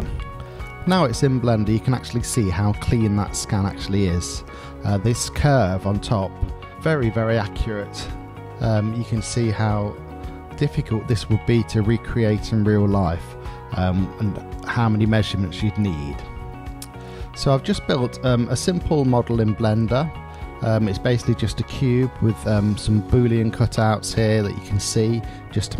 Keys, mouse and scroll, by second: 0.7 drag, 1.4 middle click, 2.1-5.3 middle drag, 5.9 click, 13.3-15.9 middle drag, 17.9-19.7 middle drag, 20.1 click, 20.6-23.4 middle drag, 23.7-24.2 middle drag.